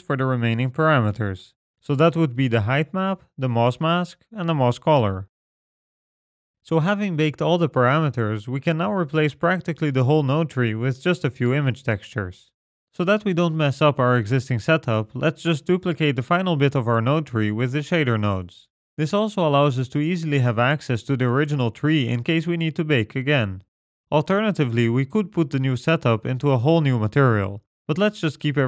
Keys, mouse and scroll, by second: 0.3-1.1 scroll down 9, 0.7 middle click, 1.5-2.0 scroll up 3, 1.7 middle click, 2.8 middle click, 3.3 scroll down 1, 4.3 middle click, 6.3 ctrl+right click, 6.3 scroll down 4, 10.9 click, 11.5 g, 12.7 click, 13.3 middle click, 14.0-15.4 scroll down 6, 15.0 middle click, 15.7 click, 17.1 shift+click, 17.5 middle click, 17.7-18.6 scroll up 6, 18.6 shift+click, 19.2-19.6 scroll down 8, 20.1 shift+d, 22.2 click, 22.4-23.6 scroll up 8, 22.7 middle click, 23.2 middle click, 23.6 click, 23.8 middle click, 24.1 g, 24.8 middle click, 25.4 middle click, 26.2 click, 26.5 g, 27.5 middle click, 27.9-28.4 scroll down 7, 28.4 click.